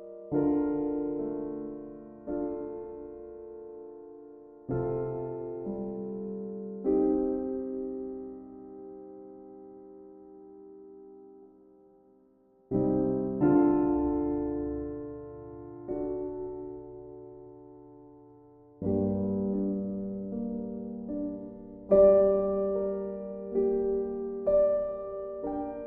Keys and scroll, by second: 16.2 b.